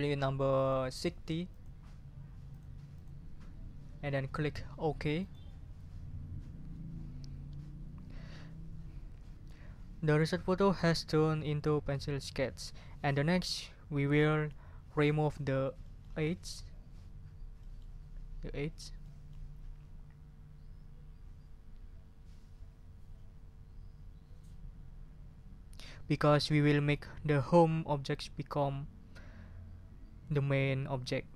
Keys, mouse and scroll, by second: 0.7 click, 1.5 click, 2.5 click, 2.9 click, 5.2 scroll up 1, 15.8-16.2 scroll up 1, 17.6-18.0 scroll up 1, 19.0 click.